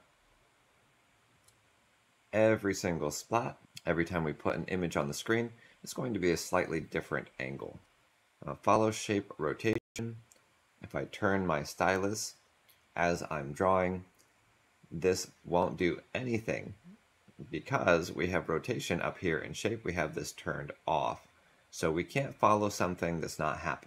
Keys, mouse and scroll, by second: 8.1 ctrl+z.